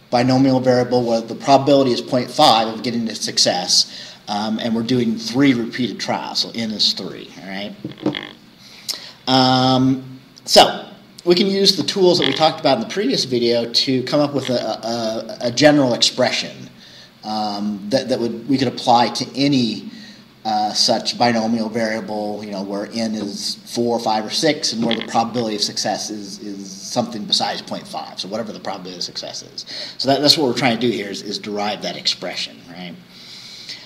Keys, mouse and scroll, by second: 9.0-9.4 scroll down 2, 10.8 scroll down 2, 19.6 scroll up 2, 30.0-31.0 scroll down 4.